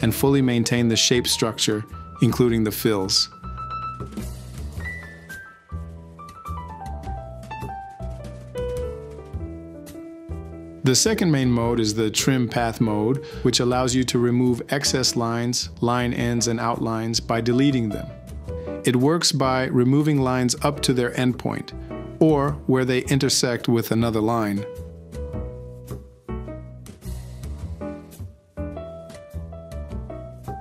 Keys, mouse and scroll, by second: 1.0 alt+c, 2.1 h, 24.2 ctrl+z, 27.0 e.